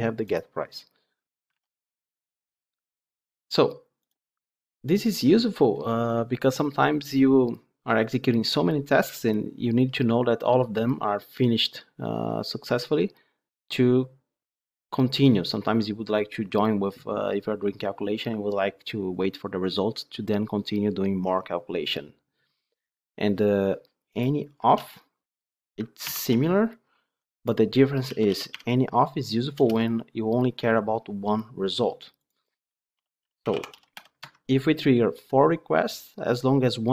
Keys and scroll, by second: 1.4 ctrl+Tab, 24.7 ctrl+d, 26.0 ctrl+/, 29.4 Return, 34.1 Escape.